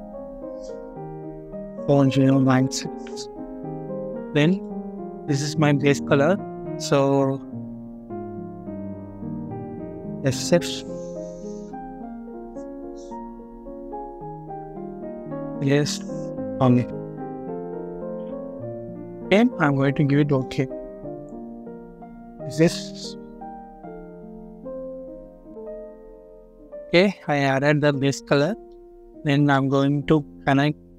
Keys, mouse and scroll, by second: 1.5-2.3 typing, 9.9 typing, 11.4-12.3 typing, 14.8-16.7 typing, 18.1 Return, 22.7-23.0 scroll down 1, 24.1 scroll up 1, 26.8 scroll up 1, 28.3 middle click, 28.9 scroll down 1, 29.4 middle click, 29.8 scroll up 1.